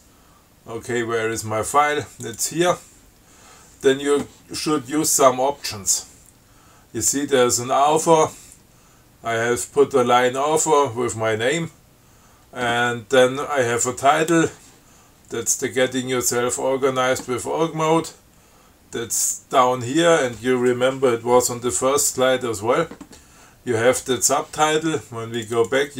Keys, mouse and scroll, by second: 2.5 click, 25.6 click.